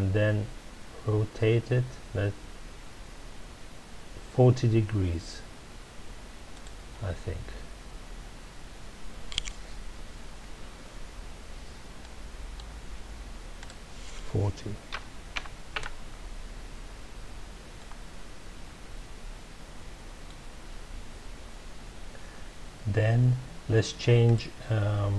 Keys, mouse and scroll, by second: 6.6 click, 12.0-13.5 middle drag, 13.5-15.8 drag, 15.8 KP_Enter, 17.7-20.8 middle drag, 24.2 click.